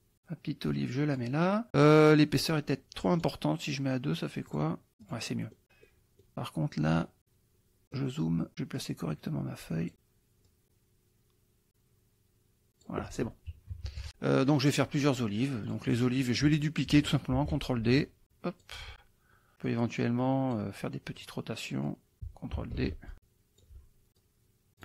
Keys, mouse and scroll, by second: 1.8 click, 3.3 right click, 4.6 click, 5.2 click, 5.9 middle click, 7.2 click, 7.8 middle click, 8.5 click, 8.8-9.9 drag, 10.5-13.3 drag, 13.7 -, 14.1 middle click, 15.0 middle click, 15.7 click, 16.0 middle click, 17.3 ctrl+d, 17.9 ctrl+click, 19.7-20.7 drag, 21.2 click, 21.9 click, 22.7 ctrl+d, 23.1 ctrl+click, 24.2 click.